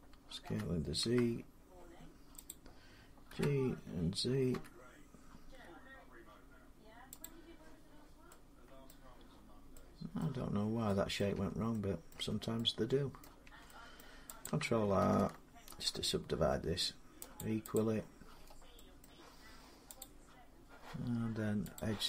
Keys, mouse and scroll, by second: 0.3-0.8 typing, 2.3 click, 3.1 g, 4.3 z, 4.7 z, 7.0 click, 8.7 middle click, 9.1-9.5 scroll down 4, 9.5-10.0 scroll, 11.0 scroll, 11.2 Tab, 11.2 middle click, 11.2 scroll up 4, 11.9 middle click, 12.0 Tab, 13.0 middle click, 13.0 middle click, 13.3 Tab, 13.8 middle click, 14.2 click, 15.5 ctrl+r, 16.1 scroll up 3, 17.2 click, 17.6 click, 18.1 scroll down 5, 18.3 middle click, 18.8-21.7 middle click, 19.8 click, 21.6 click.